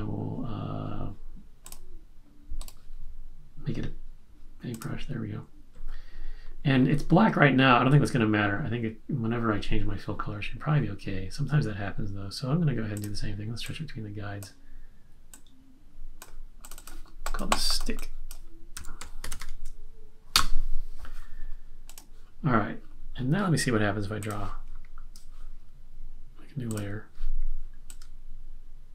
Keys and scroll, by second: 18.5-19.8 typing, 20.3 Return.